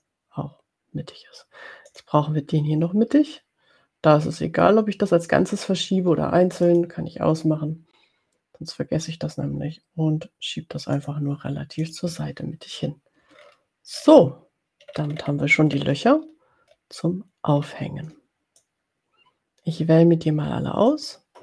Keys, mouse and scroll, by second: 0.1 click, 2.1 click, 6.7 click, 11.3 click, 11.8 click, 13.6-14.5 ctrl+scroll down 4, 14.9-15.9 ctrl+scroll up 4, 16.5-16.9 ctrl+scroll down 2, 17.6 ctrl+scroll up 2, 18.6-21.4 drag.